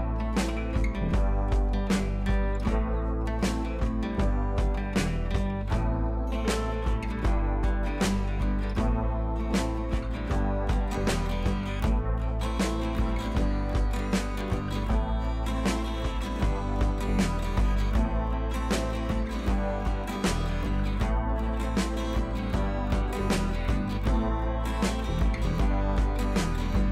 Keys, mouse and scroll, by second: 6.4 click, 8.0 click, 8.8 b, 9.1 click, 14.4 scroll down 1, 14.6 scroll up 1, 14.8 scroll down 1, 14.9 scroll up 1, 15.0 scroll down 1, 15.0 scroll up 1, 15.5-17.9 drag, 21.7 ctrl+t, 22.2-24.5 alt+drag, 25.2 right click, 25.7 click.